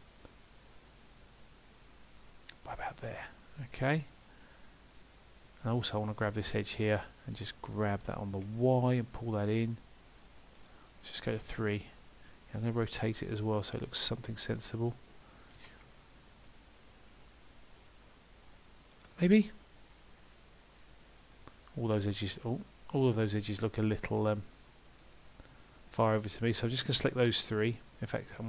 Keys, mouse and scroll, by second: 3.6 middle click, 6.5 click, 7.1 middle click, 8.4 g, 11.4 KP_3, 12.7 r, 19.4 middle click, 21.9 right click, 23.3 click, 24.1 shift+click.